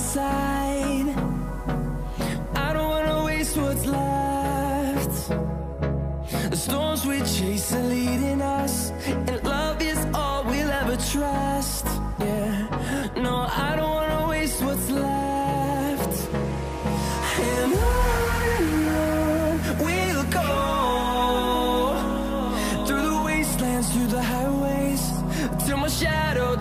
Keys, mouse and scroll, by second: 3.1 ctrl+d, 3.7 ctrl+t, 8.8 alt+click, 10.5 Return, 13.3 e, 14.0 alt+right click, 15.4 ctrl+z, 20.4 v, 22.3-22.7 alt+scroll down 1, 22.9 space, 24.7 right click, 26.0 double click.